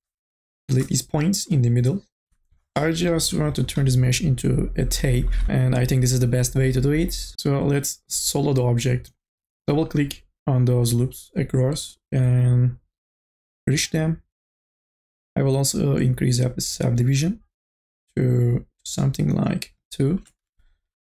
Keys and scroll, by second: 2.2 Delete, 5.5 2, 5.5 e, 20.5 e.